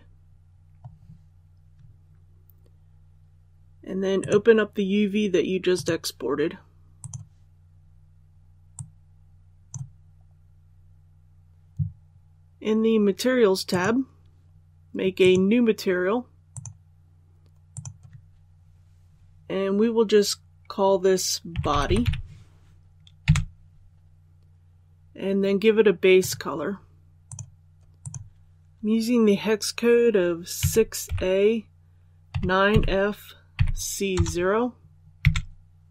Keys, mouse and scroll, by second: 0.1-1.1 scroll up 1, 4.1 click, 10.0 scroll down 1, 11.5 click, 21.4-21.9 typing, 30.5-31.0 typing, 32.2-34.0 typing.